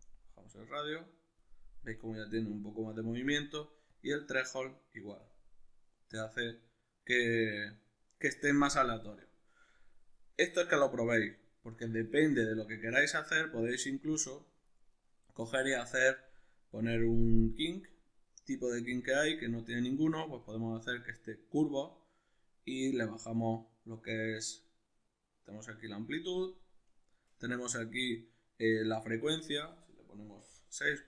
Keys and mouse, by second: 14.9-18.9 middle drag, 18.9-31.0 drag.